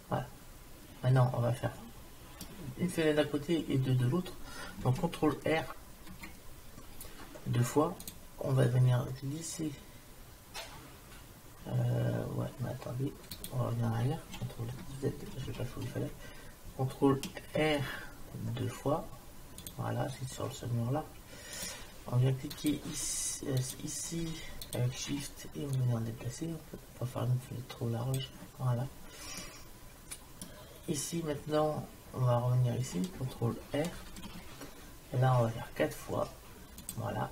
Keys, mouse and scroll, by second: 0.0-1.8 middle drag, 6.0 ctrl+r, 15.5 ctrl+z, 17.6 ctrl+r, 22.6-25.8 drag, 26.5 click, 29.4-31.3 middle drag, 33.9 ctrl+r.